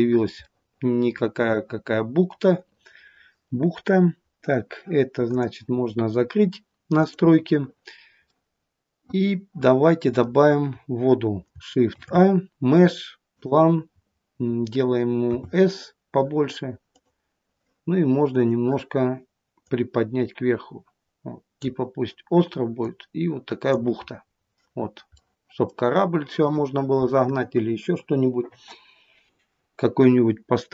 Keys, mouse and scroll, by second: 5.1 click, 9.6 middle click, 10.3 scroll down 1, 11.7 shift+a, 15.4 scroll down 3, 23.9 scroll up 6, 25.1 middle click.